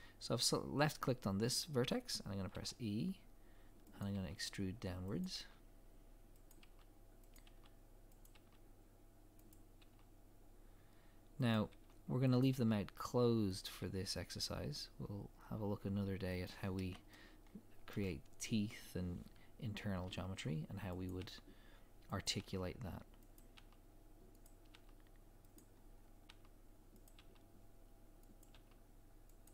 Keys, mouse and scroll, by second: 2.5 e, 16.7 scroll down 1, 17.1 shift+middle click, 17.3 e, 17.9 shift+scroll down 1, 18.1 scroll up 1, 21.6 e, 25.8 scroll down 1, 26.3 e.